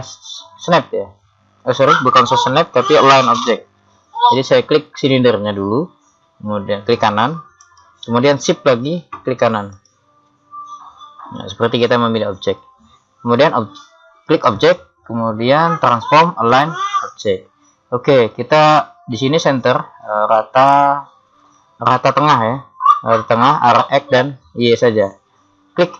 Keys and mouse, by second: 1.2-2.2 middle drag, 7.6-9.6 right drag, 9.8 right click.